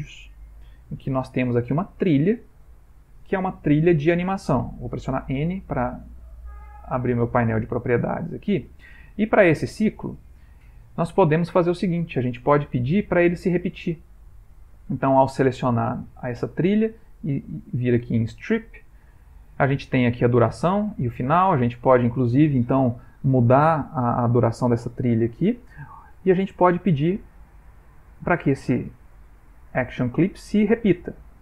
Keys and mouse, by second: 0.9 click, 2.7 middle click, 5.2 n, 6.9 click, 9.1 ctrl+middle click, 9.6 middle click, 10.1 ctrl+middle click, 10.5 middle click, 10.9 ctrl+middle click, 14.8 click, 28.1 click, 29.9 middle click.